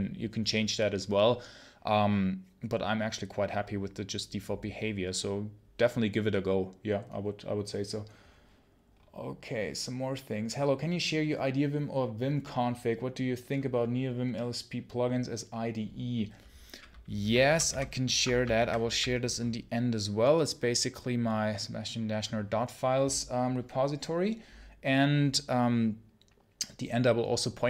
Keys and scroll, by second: 17.3 ctrl+super+h, 17.6 ctrl+super+h, 18.5 ctrl+Page_Down.